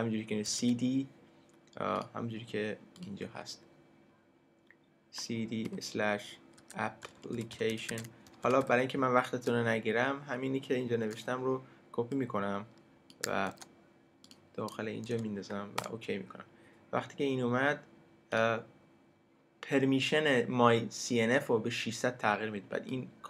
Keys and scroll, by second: 0.3-1.1 typing, 5.6-9.5 typing, 13.5 super+c, 15.1 super+v, 15.8 super+Return.